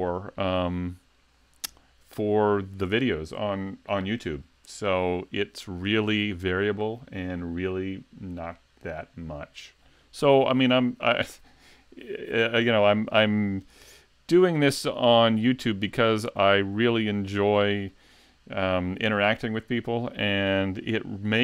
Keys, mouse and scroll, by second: 14.5-15.1 scroll up 2, 15.1 shift+middle click, 16.1-16.5 scroll down 1, 16.5 shift+middle click, 17.1 middle click, 17.7 shift+middle click.